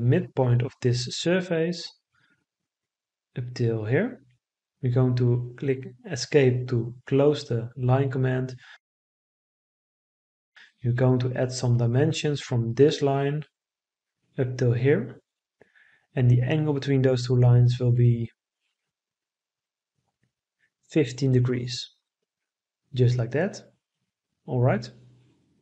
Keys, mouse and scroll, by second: 5.9 Escape, 19.4 1, 19.9 5, 20.6 Return, 23.4 Escape.